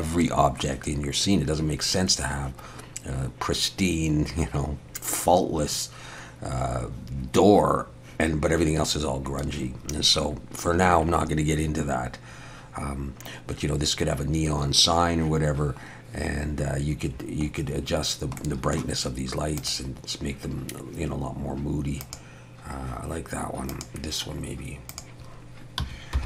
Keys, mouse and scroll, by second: 17.8 scroll down 1, 18.4 middle click, 19.6 click, 22.0 click.